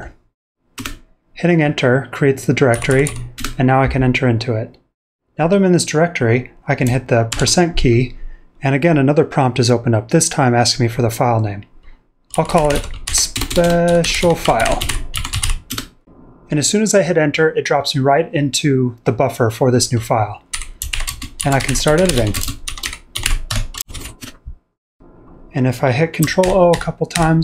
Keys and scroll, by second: 0.0-0.3 typing, 0.7 Return, 2.7-3.0 typing, 3.3 Return, 5.4 typing, 7.3 %, 12.1-14.5 typing, 20.3-24.2 typing, 25.4 typing, 26.4 ctrl+o, 26.7 ctrl+o, 27.1 ctrl+o.